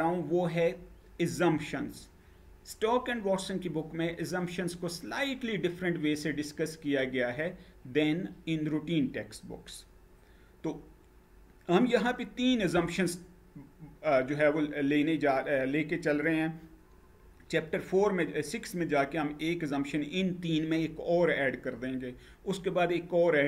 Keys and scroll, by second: 12.3 Down.